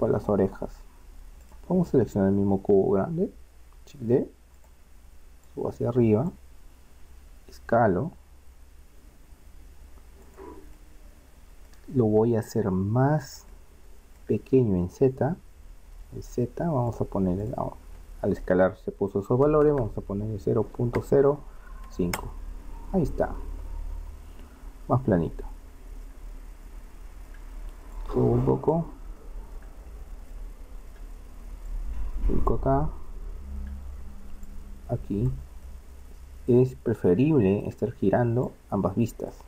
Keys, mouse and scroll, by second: 1.4-3.2 right drag, 3.2-4.6 middle drag, 4.1 shift+d, 5.5-7.2 drag, 7.2 s, 10.8-16.9 middle drag, 16.9-18.4 drag, 19.6 BackSpace, 24.5-25.6 middle drag, 27.9-29.1 drag, 29.3 click, 29.9-31.7 middle drag, 31.7-33.1 drag, 33.1 middle click, 34.5 click, 34.9 click, 35.7 middle click, 36.7 middle click, 38.6-39.4 drag.